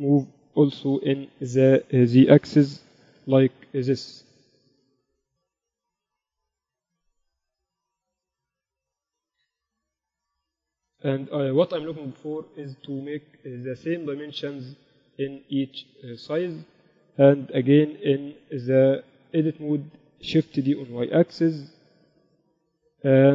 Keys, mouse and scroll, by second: 0.7 g, 3.9 r, 5.6 g, 6.9-8.4 middle drag, 8.1 KP_8, 8.4 z, 9.5 KP_7, 14.1-17.4 drag, 18.3 Tab, 18.6 a, 21.1 a, 21.1 shift+d.